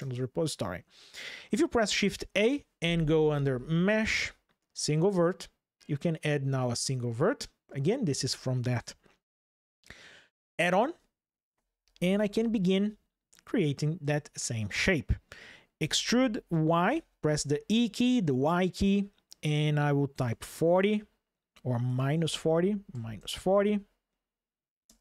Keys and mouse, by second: 0.0 ctrl+shift+\, 1.6 shift+a, 12.3-13.8 shift+drag, 15.6 e, 16.6 y, 20.0 KP_4, 20.1 KP_0, 21.6 BackSpace, 21.8 BackSpace, 22.0 BackSpace, 22.7 KP_Subtract, 22.9 KP_4, 24.6 KP_Enter.